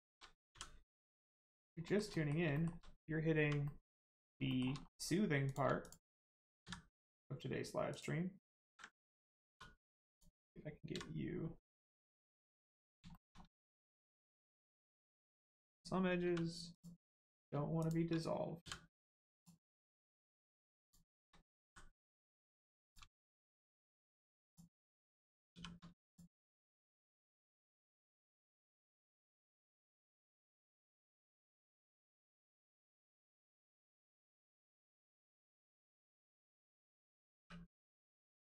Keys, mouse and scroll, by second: 0.5 f, 0.9 scroll down 1, 1.2 middle click, 1.8 shift+middle click, 2.1 middle click, 2.1 middle click, 2.5 shift+middle click, 3.6 middle click, 4.5 shift+middle click, 5.4 click, 5.8 shift+click, 6.6 x, 7.9 click, 8.6 ctrl+z, 9.5 z, 10.1 click, 12.8 middle click, 13.1 shift+middle click, 13.4 middle click, 13.8 scroll up 1, 14.3 middle click, 16.2 1, 16.7 click, 17.8 shift+click, 19.4 click, 20.8 shift+click, 21.6 m, 22.3 click, 23.1 shift+middle click, 24.4 shift+click, 25.5 shift+r, 26.0 click, 26.1 click, 26.3 scroll down 1, 26.9 middle click, 28.7 shift+middle click, 29.3 middle click, 29.3 middle click, 31.7 middle click, 34.1 click, 34.6 middle click, 37.3 3, 37.7 click, 38.1 middle click.